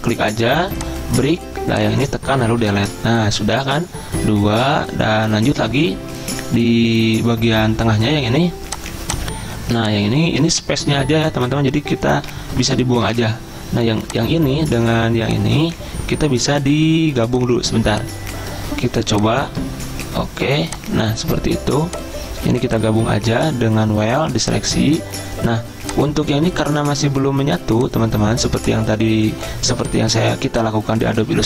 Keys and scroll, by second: 2.5 Delete, 12.4 ctrl+z, 13.1 Delete.